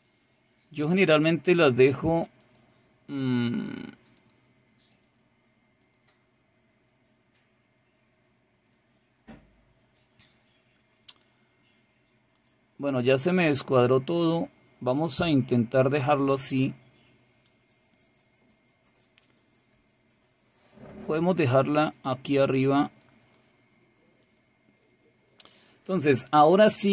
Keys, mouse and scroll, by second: 2.3 click, 4.1 click, 4.8 click, 5.8 click, 12.3 click, 13.2 click, 15.9-23.0 drag, 24.2 click.